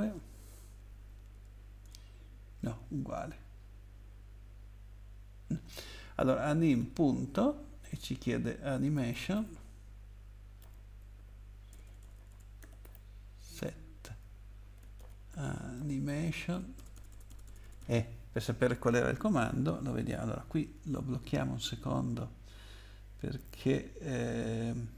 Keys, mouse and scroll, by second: 1.8 BackSpace, 6.8 ., 8.9-9.3 typing, 10.4-16.9 typing.